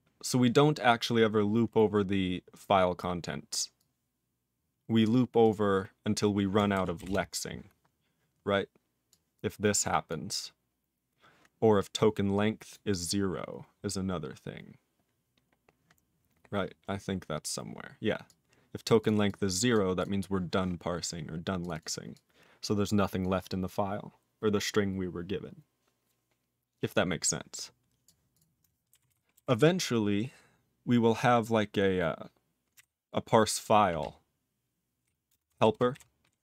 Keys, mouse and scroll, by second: 0.4 click, 1.2-2.8 scroll down 3, 2.8-3.8 scroll down 1, 3.8 click, 5.0 click, 5.4 click, 7.0 Return, 9.1 click, 10.1 click, 11.9 click, 12.7 click, 12.9 click, 13.3-14.9 scroll down 18, 15.5-18.0 scroll down 18, 18.3 click, 18.8 click, 19.0 click, 19.3 double click, 19.7 double click, 20.0 click, 21.6 click, 21.7 double click, 22.1 click, 23.2 click, 27.2 click, 28.0 click, 28.3 click, 29.1 ctrl+s, 32.8 ctrl+g, 34.0-35.0 ctrl+p, 35.3 ctrl+space, 35.5 ctrl+alt+b, 35.9 ctrl+g.